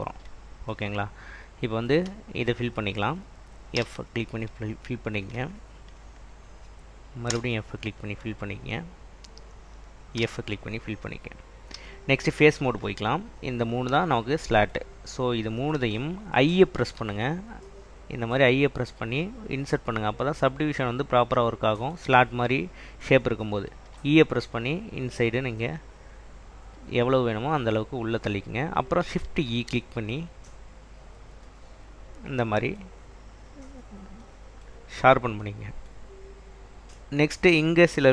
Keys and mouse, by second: 4.0 f, 7.5 f, 10.4 f, 11.8 3, 13.7 shift+click, 17.1 i, 24.1 e, 27.4 click, 29.4 shift+e, 31.2 click.